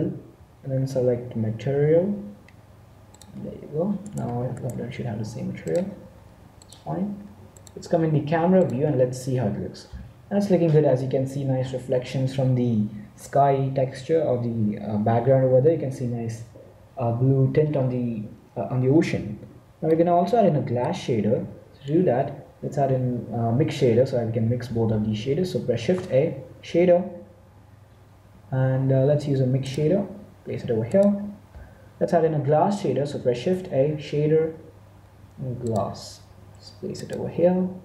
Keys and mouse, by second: 0.1 ctrl+l, 4.0-5.6 right drag, 5.6 middle click, 6.4 click, 7.5-9.2 drag, 19.8-22.1 middle drag, 25.7 shift+a, 31.1-32.7 drag, 32.8 click, 33.3 shift+a.